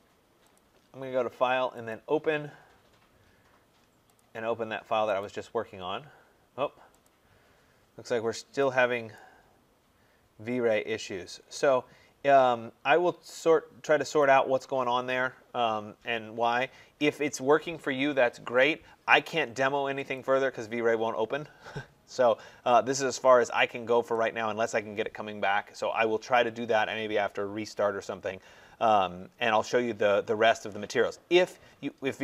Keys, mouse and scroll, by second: 0.4 click, 1.9 click, 14.1 click, 16.5 middle click, 16.6 middle click, 16.8 middle click, 18.6 middle click, 20.0 click, 23.2 middle click, 24.5 right click, 31.4 middle click.